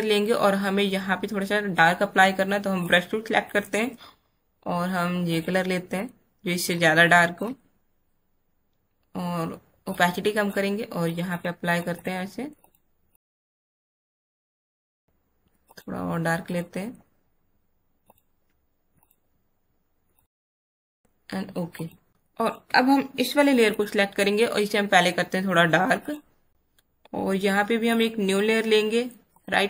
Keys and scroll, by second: 22.1 space.